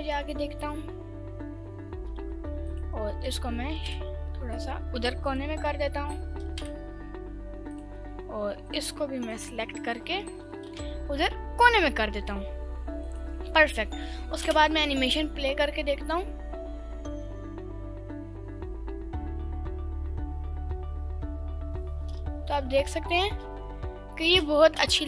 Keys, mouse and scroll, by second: 1.2 click, 2.3 ctrl+s, 2.7 click, 3.2 g, 3.8 shift+z, 5.3 ctrl+click, 6.2 g, 6.5 shift+z, 7.7 ctrl+click, 8.7 click, 9.3 click, 10.3 g, 10.8 shift+z, 13.1 ctrl+click, 14.4 space, 22.5 space, 23.3 space, 24.5 space.